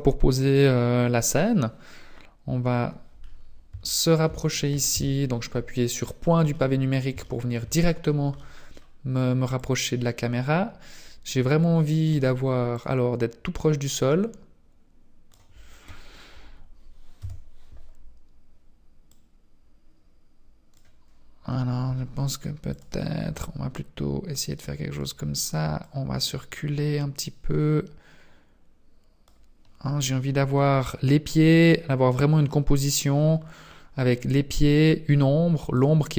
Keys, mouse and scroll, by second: 3.2 scroll up 5, 3.8 shift+middle click, 4.9 KP_Decimal, 6.1-6.5 scroll down 2, 6.5 middle click, 7.2 shift+middle click, 8.0 scroll down 1, 8.3 middle click, 9.5 click, 12.8 click, 17.2 KP_3, 19.1 click, 21.9 g, 22.9 r, 25.7 click, 33.2-34.1 scroll down 9, 35.7 right click.